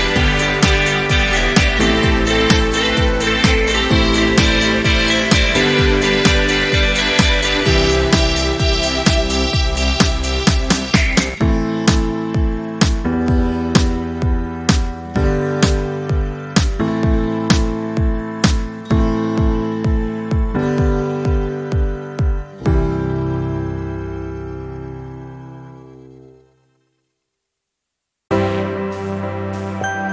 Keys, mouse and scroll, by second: 0.7 click, 6.8 v, 7.3 ctrl+scroll down 1, 8.7-9.1 ctrl+scroll up 1, 10.0-11.4 drag, 12.9 ctrl+scroll up 1, 14.3-15.6 drag, 16.1 v, 16.8 click, 17.1 click, 18.7 ctrl+scroll down 1, 21.2 click, 22.2 ctrl+c, 22.7 click, 23.2 ctrl+shift+v, 24.3 ctrl+scroll up 1, 25.2 click, 27.5 Delete, 28.8-30.1 drag.